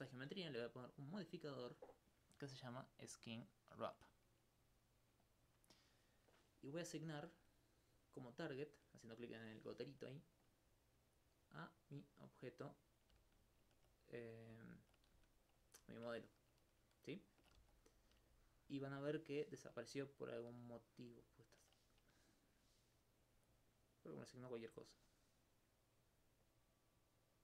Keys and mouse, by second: 0.7-12.6 drag, 13.6 alt+click, 14.7 alt+click, 15.1 alt+click, 15.8 alt+click, 16.1 alt+click, 18.3 alt+click, 18.7 alt+click, 20.7 alt+click, 23.7-24.8 drag, 24.8 click, 26.5-27.4 drag.